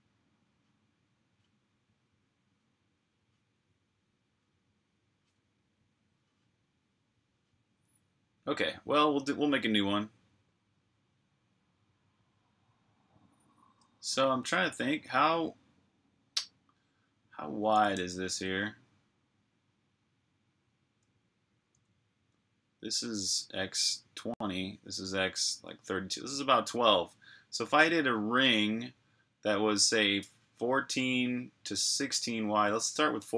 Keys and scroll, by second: 18.2 n.